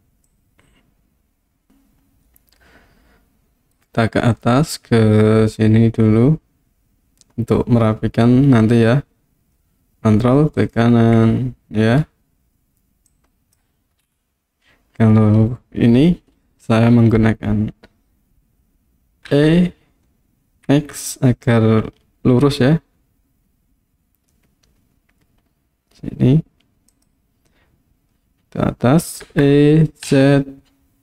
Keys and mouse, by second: 0.3-3.8 drag, 10.6 ctrl+right click, 13.1 click, 19.3 e, 20.7 x, 26.9 click, 29.3 e, 30.1 z.